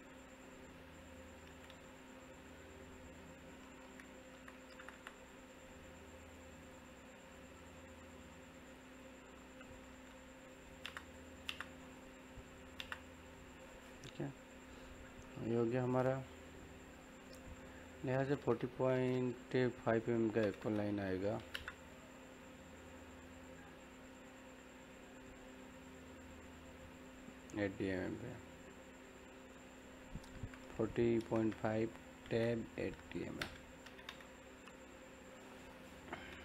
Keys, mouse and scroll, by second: 0.0 click, 2.4-4.3 middle drag, 4.0-5.0 typing, 5.1 click, 9.3 e, 9.6 click, 10.6-11.4 typing, 11.1 click, 11.8 click, 12.7 space, 13.0 scroll down 1, 13.1 middle click, 13.7 scroll up 1, 13.9-19.1 middle drag, 20.0 middle click, 20.0 typing, 21.3 l, 21.5 space, 22.7 click, 24.7-26.6 scroll up 1, 32.3 Tab, 35.3 click.